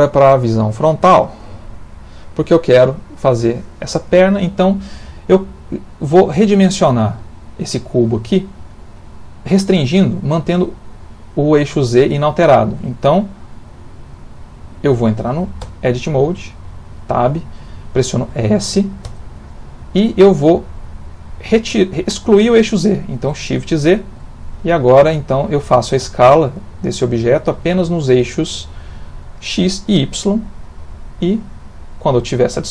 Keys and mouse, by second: 0.7 click, 1.6 ctrl+middle click, 1.8 middle click, 2.5 shift+middle click, 2.6 shift+middle click, 5.7 middle click, 7.7 middle click, 10.3 middle click, 15.6 Tab, 19.0 s.